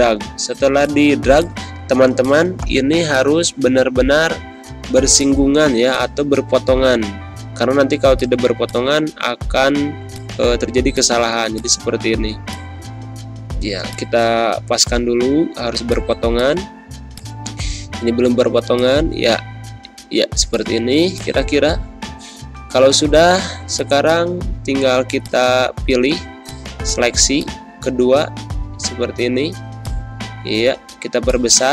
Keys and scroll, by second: 0.5 z, 1.1 space, 4.9 z, 5.6 space, 6.8 ctrl+-, 15.6 z, 16.1 space, 16.7 v, 20.8 z, 22.1 ctrl+0, 22.8 ctrl+-, 28.8 ctrl+g.